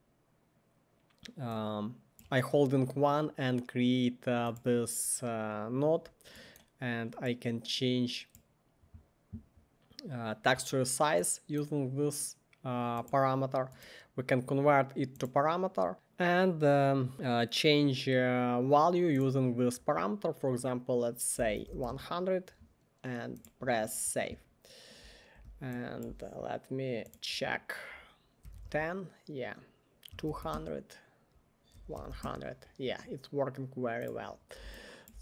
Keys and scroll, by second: 15.9 Left, 15.9 Return, 15.9 typing, 21.6 typing, 21.9 Return, 28.4 typing, 28.6 Return, 29.9-32.3 typing.